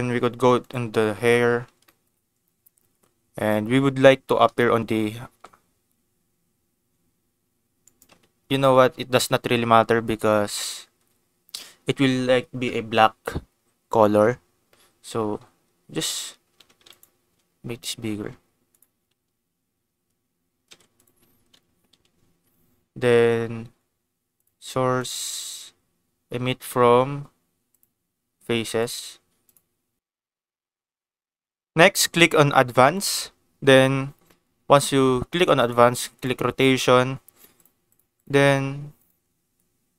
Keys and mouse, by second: 0.6 click, 1.8 shift+middle click, 5.2 g, 5.2 z, 7.8 click, 8.4 ctrl+s, 16.9 click, 17.2 s, 18.7 click, 20.6 ctrl+s, 24.3 click, 25.0-27.9 drag, 28.8 click, 32.8 click, 35.5 click, 36.1 click, 37.6 click, 38.2 click, 39.9 click.